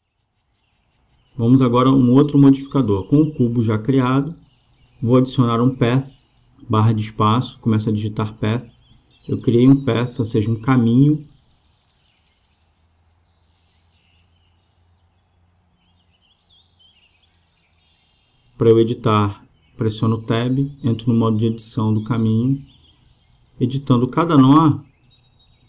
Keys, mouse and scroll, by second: 5.3-6.4 drag, 5.8 space, 13.6-15.4 middle drag, 17.4 KP_0, 19.1 Tab, 20.1-21.9 right drag, 24.1 e.